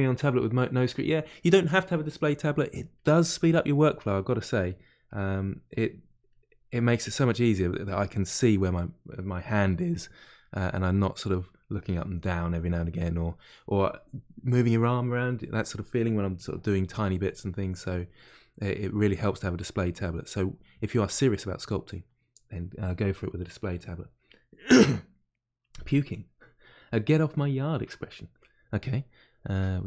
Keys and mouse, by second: 2.9-4.0 drag, 4.0-5.1 middle drag, 5.1-9.8 drag, 9.8 middle click, 10.4-12.5 drag, 12.5-16.1 middle drag, 16.1-17.8 drag, 17.8-18.8 middle drag, 18.8 click, 19.6 middle click, 20.0-21.3 drag, 21.3-29.8 middle drag.